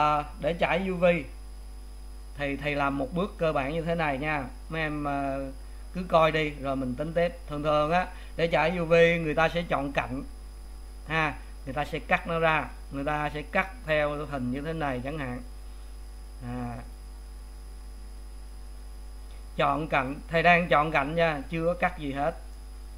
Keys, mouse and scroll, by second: 1.9 scroll down 2, 3.1-4.5 middle drag, 4.5-5.0 scroll up 1, 10.6 2, 11.7 click, 15.1 shift+click, 16.9 shift+click, 17.5-18.9 middle drag, 18.9 shift+click, 20.1 shift+click, 21.3 shift+click, 22.1-22.9 middle drag.